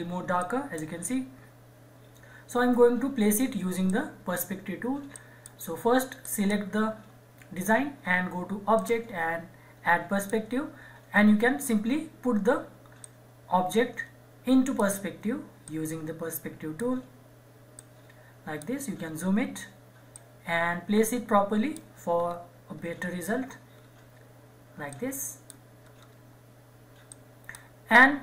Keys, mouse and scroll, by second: 3.8 click, 8.7 click, 13.0-15.7 drag, 14.9-15.7 drag, 16.0-17.8 drag, 18.1-18.9 drag, 18.9 scroll up 1, 20.4-22.0 drag, 22.2-22.7 scroll down 1, 24.9 click, 25.8 scroll up 1, 27.1 click, 28.1 scroll down 1.